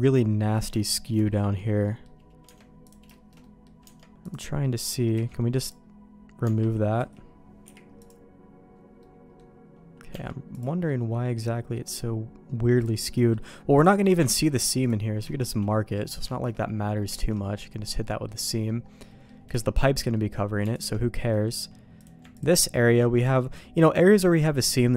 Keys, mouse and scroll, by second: 0.8 shift+middle click, 1.2 middle click, 1.8 middle click, 2.4 Tab, 2.8 click, 3.1 shift+middle click, 3.4 middle click, 3.8 Tab, 4.2 click, 4.6 middle click, 5.1 x, 6.4 Tab, 7.0 a, 7.6 u, 9.0 middle click, 10.0 u, 10.1 Tab, 10.5 click, 10.9 middle click, 11.7 middle click, 12.8 click, 13.1 middle click, 13.8 click, 14.0 middle click, 14.2 ctrl+e, 15.3 middle click, 15.9 middle click, 16.3 middle click, 17.1 alt+a, 17.4 middle click, 18.0 middle click, 18.5 middle click, 19.1 middle click, 19.6 shift+middle click, 20.1 middle click, 20.7 alt+click, 21.3 middle click, 22.0 click, 22.3 ctrl+click, 22.6 middle click, 23.2 ctrl+click.